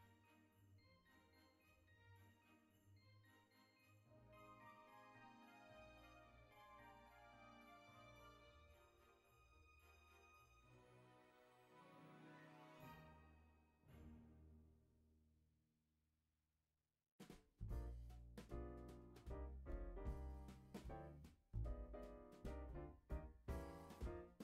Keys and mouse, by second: 0.3 click, 2.8 alt+z, 7.3 click, 7.6 alt+z, 8.4 e, 9.5 click, 9.7 e, 11.2 click, 11.4 e, 12.0 click, 12.3 e, 12.9 click, 14.0 e, 15.0 click, 15.1 e, 16.0 click, 18.1 ctrl+r, 18.5 click, 19.3 g, 20.1 click, 20.4 e, 23.1 click, 23.3 e, 24.3 click.